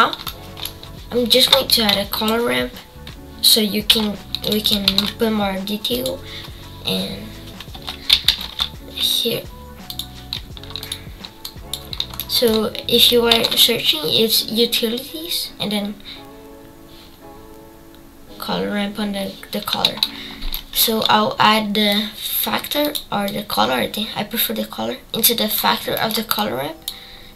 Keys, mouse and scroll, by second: 1.7 click, 4.6-9.9 drag, 21.9-25.5 drag, 26.3-27.3 drag.